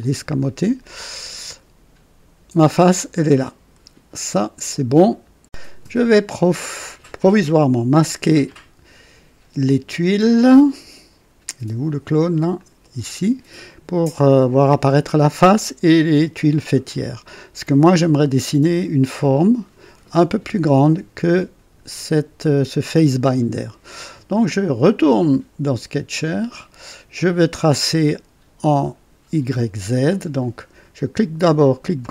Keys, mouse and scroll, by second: 0.8-5.2 drag, 8.4 click, 9.5 space, 12.5 click, 12.8 space, 16.8-18.0 drag, 24.9 click, 26.2 click, 32.0 click.